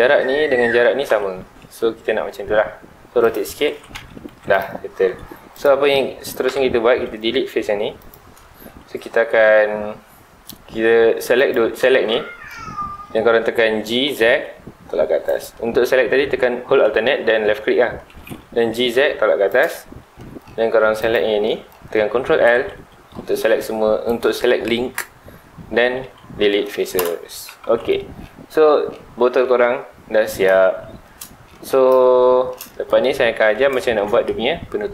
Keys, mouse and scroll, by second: 1.4 ctrl+z, 1.9 r, 3.3 click, 3.7 alt+a, 3.9 Tab, 4.2 alt+a, 4.5 click, 5.0 Tab, 5.4 3, 5.5 click, 6.4 ctrl+l, 7.3 x, 8.6 2, 11.3 alt+click, 12.1 middle click, 12.9 scroll down 2, 13.1 middle click, 13.8 g, 15.4 ctrl+click, 15.7 ctrl+z, 18.7 g, 19.6 ctrl+click, 19.8 3, 20.1 middle click, 21.0 click, 21.4-22.4 middle drag, 22.4 ctrl+l, 23.3 g, 24.2 right click, 26.0 x, 27.0 Return, 27.3 Tab, 27.6 alt+a, 27.9 scroll down 2, 28.2-28.6 middle drag, 28.6 scroll up 2, 28.9-30.5 middle drag, 30.5-30.9 scroll down 2, 30.9 shift+middle drag, 31.2-31.5 scroll up 2, 31.5-33.1 middle drag, 33.1-33.4 scroll down 2, 33.4-34.9 middle drag.